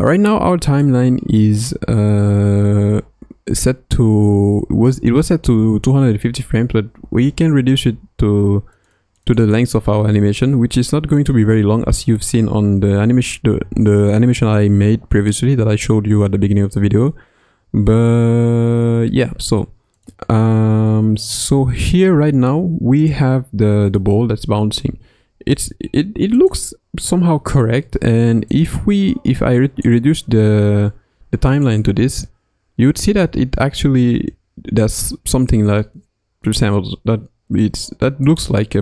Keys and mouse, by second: 0.9-7.8 drag, 9.0 click, 11.2-21.5 drag, 21.5 space, 22.1 space, 23.1-24.8 drag, 24.8 space, 25.5 space, 26.4-29.9 drag, 33.2 space, 36.4 click, 38.2 click.